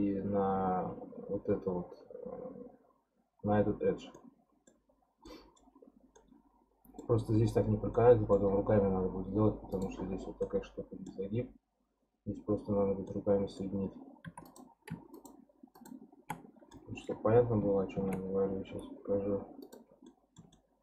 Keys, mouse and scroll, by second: 4.1 middle click, 4.9-5.2 scroll down 1, 5.2-7.2 middle drag, 7.2-7.9 scroll up 11, 7.9 middle click, 8.5 scroll down 1, 9.6-10.4 scroll down 4, 9.7 click, 10.4-13.8 middle drag, 13.8-14.2 scroll down 1, 14.2 3, 14.4 click, 15.1 shift+click, 15.7 shift+click, 16.4 scroll down 5, 16.7-17.9 middle drag, 17.9 shift+d, 20.1-20.8 middle drag.